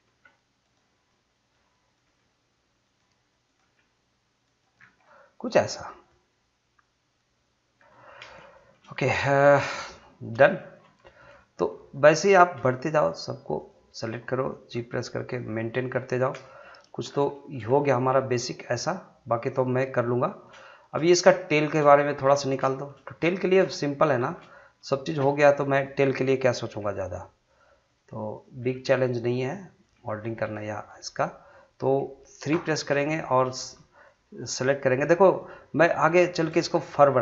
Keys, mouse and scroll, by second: 0.0 g, 0.6 right click, 1.1 middle click, 1.9 click, 2.0 g, 2.8 click, 3.6 g, 4.4 click, 4.8 scroll down 1, 5.0 middle click, 5.8 scroll up 1, 6.1-8.1 middle drag, 8.1 scroll down 1, 8.5 shift+middle click, 8.9 middle click, 9.4 shift+scroll up 1, 9.6 shift+middle click, 10.0 middle click, 10.8 scroll up 2, 11.0 shift+middle click, 11.4 middle click, 12.2 click, 12.9 shift+click, 14.7 g, 15.3 click, 16.1-16.4 scroll down 1, 16.4 middle click, 17.0 scroll down 1, 17.3-20.5 shift+middle drag, 20.7 shift+middle click, 22.0 shift+middle click, 22.3 scroll up 2, 22.7 shift+middle click, 23.0 scroll up 2, 23.3 shift+middle click, 23.6 middle click, 24.0 scroll up 1, 24.2 shift+middle click, 24.8 click, 26.8 g, 27.4 click, 28.6 g, 29.1 click, 29.9 g, 30.4 click, 30.9 middle click, 32.5 3, 33.2 click, 33.6 shift+click, 36.5-36.8 shift+scroll down 2, 36.8 middle click.